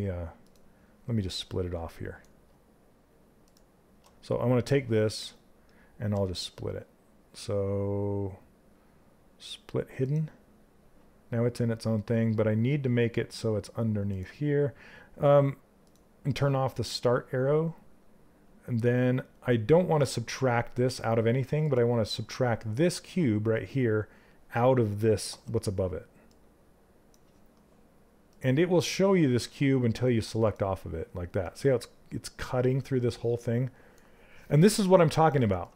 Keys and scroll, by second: 24.9 w.